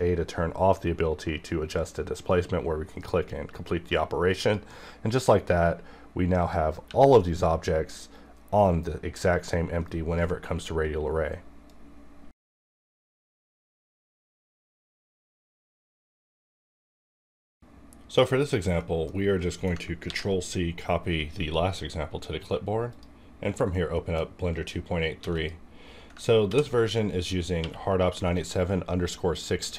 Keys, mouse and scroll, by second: 2.3 click, 6.9 r, 9.8 right click, 18.4 scroll up 2, 18.7 middle click, 19.1 scroll down 1, 19.4 middle click, 19.4 middle click, 19.9 ctrl+c, 22.9 click, 23.7-25.2 middle drag, 25.2 x, 25.3 click, 25.3 click, 26.4 ctrl+v, 27.6 q.